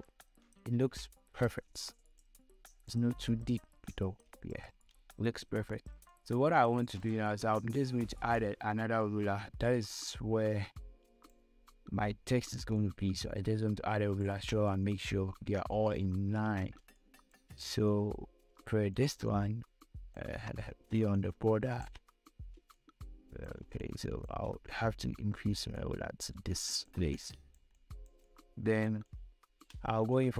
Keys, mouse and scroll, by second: 2.5 click, 3.6 scroll down 1, 4.7 scroll up 1, 6.3 space, 6.5 click, 6.8 space, 8.6-12.6 drag, 12.6 scroll up 1, 13.0 space, 13.1 click, 13.4 space, 13.7 space, 16.5-16.9 scroll down 2, 17.2 space, 17.3 click, 17.6 space, 17.9 scroll up 1, 19.2-20.9 shift+drag, 20.9 space, 21.5 shift+click, 22.3 shift+space, 23.1 shift+click, 24.0 shift+space, 24.1 click, 24.5 space, 25.9 click, 27.4 space, 27.6 click, 27.9 space, 29.4 click, 29.5 space.